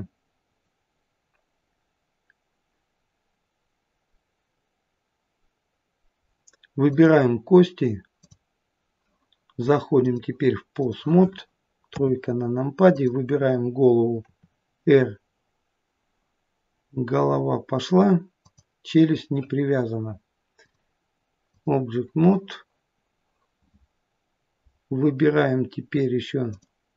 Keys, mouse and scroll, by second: 6.9 click, 8.2 click, 11.9 KP_3, 12.9 click, 14.3 r, 20.6 click, 26.5 click.